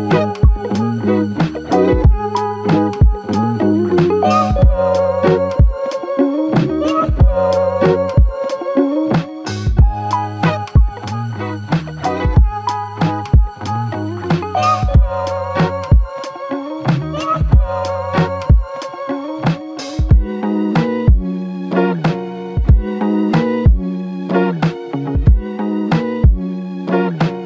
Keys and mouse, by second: 3.5 typing, 5.3 typing, 6.1 ctrl+click, 8.6 alt+click, 9.7 alt+click.